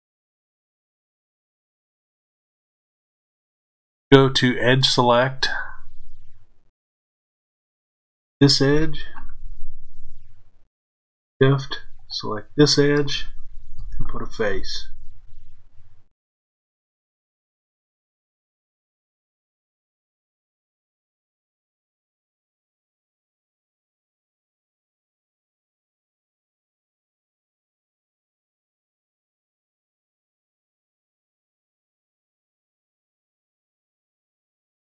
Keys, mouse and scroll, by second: 5.0 click, 7.6 click, 11.9 shift+click, 13.7 f, 17.1 click, 20.5-23.1 middle drag, 23.1 click, 27.1 shift+click, 29.2 f, 30.6 click, 32.0 shift+click, 33.0 f.